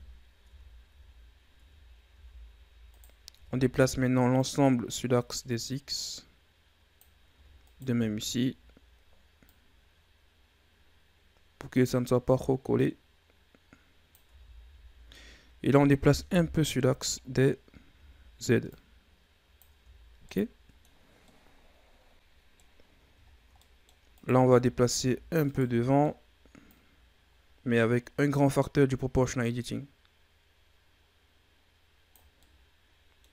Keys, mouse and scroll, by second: 0.4 Tab, 0.8 a, 1.5 Tab, 2.0 a, 2.8 right click, 3.3 Tab, 3.6 a, 4.3-7.3 drag, 7.3 Tab, 7.5 right click, 7.9 Tab, 9.3-12.4 drag, 12.7-14.2 drag, 14.2 Tab, 14.5 a, 14.7-15.1 scroll down 5, 15.1-16.3 middle drag, 16.3 KP_3, 17.1-17.9 scroll up 5, 17.9 Tab, 18.6-19.7 drag, 19.7 Tab, 20.0 scroll down 2, 20.2-22.7 middle drag, 22.7 scroll up 1, 23.2 scroll down 2, 23.5-24.1 middle drag, 24.1 right click, 24.2 Tab, 24.5-24.9 scroll down 2, 24.9-25.3 shift+scroll up 1, 25.3 right click, 25.8 middle click, 26.6-29.6 drag, 32.3-33.3 middle drag.